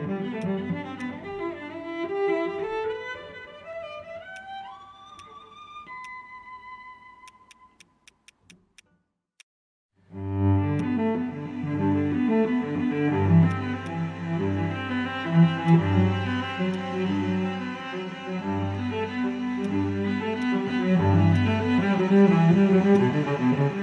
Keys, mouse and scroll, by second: 1.5 scroll up 1, 2.3-2.9 scroll down 1, 3.2 scroll up 1, 15.6 alt+click.